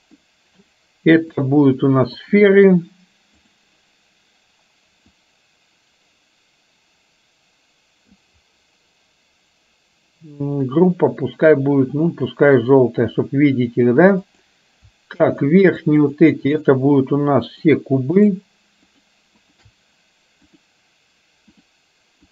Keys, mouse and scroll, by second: 0.3 middle click, 1.5-2.5 drag, 5.2-12.5 drag, 14.3 click, 15.3-15.7 shift+drag, 16.0 shift+click, 16.5-16.9 shift+drag, 17.5-18.0 shift+drag, 18.3 shift+click, 18.9 shift+click, 19.5 shift+click, 20.8-21.8 drag.